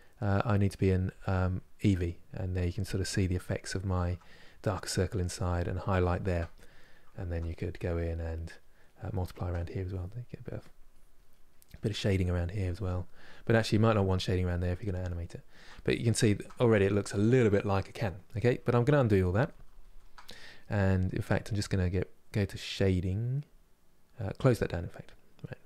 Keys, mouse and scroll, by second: 1.1-9.5 middle drag, 9.5-11.0 drag, 11.0 middle click, 11.4-12.4 drag, 12.4 middle click, 13.4 click, 13.9-18.4 middle drag, 18.4 ctrl+z, 18.6-19.6 ctrl+z, 24.1-25.6 drag.